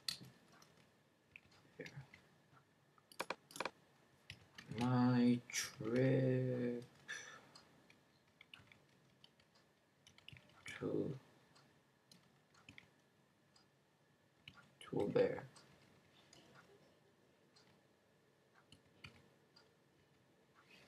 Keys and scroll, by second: 0.0-2.8 typing, 4.0-11.1 typing, 12.5-12.9 typing, 14.1-20.8 typing.